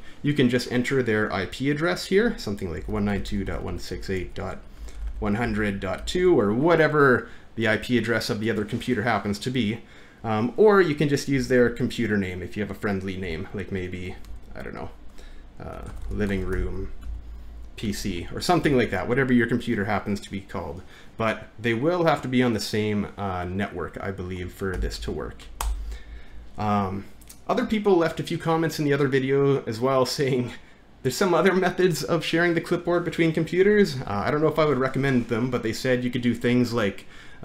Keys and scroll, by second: 3.2 typing, 10.8 typing, 27.1 typing.